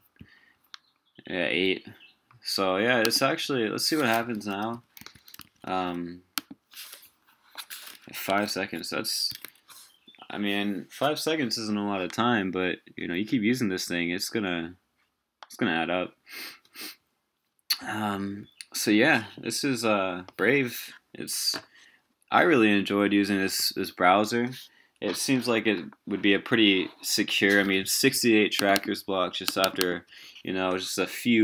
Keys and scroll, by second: 4.3 super+w, 4.7 super+t, 5.0 super+v, 5.4 super+w.